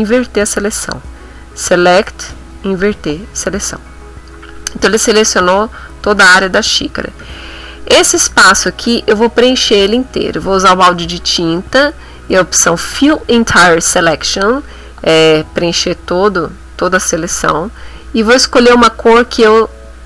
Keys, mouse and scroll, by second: 0.1 click, 2.8 click, 6.8 b, 9.5 click, 14.0 click, 18.7 click.